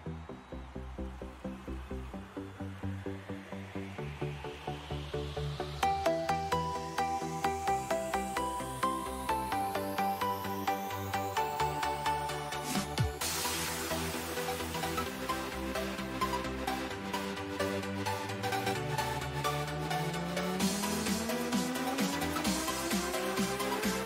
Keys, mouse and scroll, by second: 1.1-4.9 middle drag, 4.9 z, 7.1 n, 10.3-19.1 middle drag, 19.1-21.3 drag.